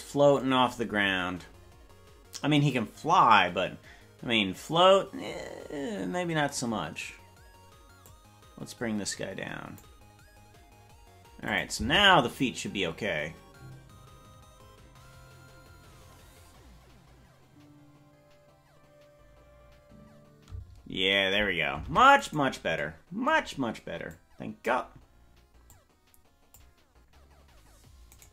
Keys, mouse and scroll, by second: 8.0-11.6 drag, 11.7 space, 22.3 ctrl+Tab, 22.3 right click, 24.1 click, 25.6 click.